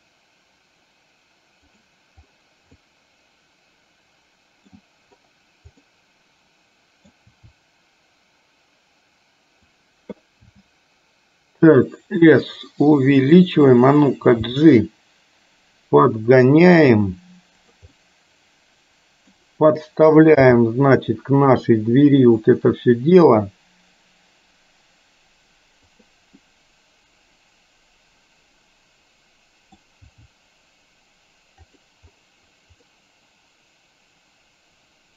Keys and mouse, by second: 2.8-4.8 middle drag, 5.9-7.1 middle drag, 7.3 r, 10.5 s, 14.5 g, 17.9-20.5 middle drag, 20.5 g, 26.4-29.9 middle drag, 30.1 g, 32.9-35.1 middle drag.